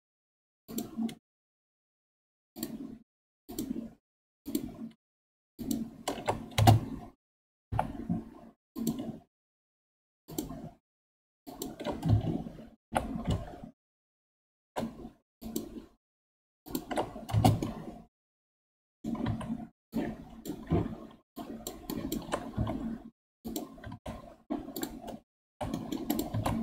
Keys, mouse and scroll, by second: 7.6 k, 12.8 k, 17.6-19.2 middle drag, 19.2 3, 19.8 click, 21.3 shift+click, 22.5 x, 23.8 ctrl+Tab, 24.7 click, 25.4 h, 25.7 middle click, 26.0 click, 26.2 ctrl+Tab.